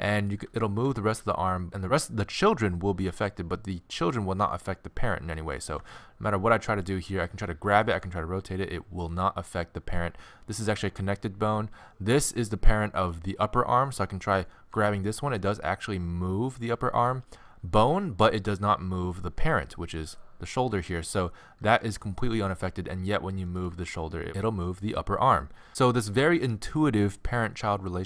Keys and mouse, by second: 0.2-1.9 drag, 0.7 r, 5.8 g, 8.0 r, 12.1-15.0 drag, 14.7 g, 21.9 r, 23.7 g.